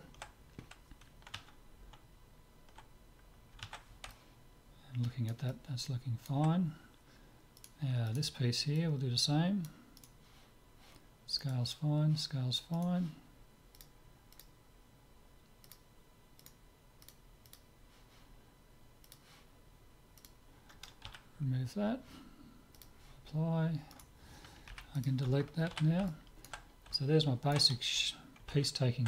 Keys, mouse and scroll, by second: 4.1-7.5 middle drag, 7.6-9.9 right drag, 8.8-10.5 drag, 10.0-14.5 right drag, 13.8-15.5 drag, 18.6 click, 19.1-21.0 drag, 21.3 z, 22.8-24.5 drag, 24.0-26.0 right drag, 24.7 Delete, 25.8 z, 26.1-29.0 middle drag.